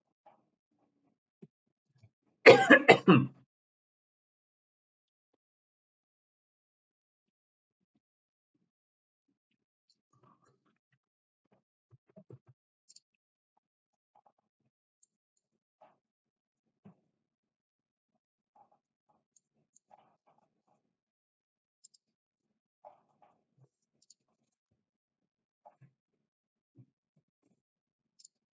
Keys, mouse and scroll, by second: 15.0 middle click, 19.3 middle click, 21.8 click, 23.9 click, 25.4 s, 27.7 Escape, 28.1 click.